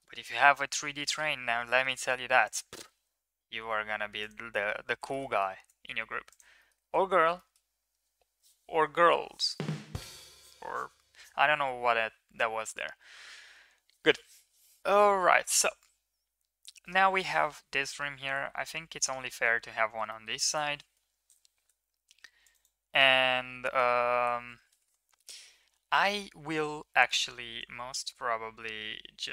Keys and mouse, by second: 0.3 shift+middle click, 1.1 shift+middle click, 1.7 shift+middle click, 2.1 ctrl+r, 5.1 middle click, 5.3 middle click, 5.6 ctrl+s, 6.1 Tab, 6.6 middle click, 6.8 ctrl+s, 7.3 shift+middle click, 18.4 Tab, 19.0 middle click, 20.0 middle drag, 20.9 KP_1, 21.8 ctrl+r, 24.5 s, 27.4 ctrl+b.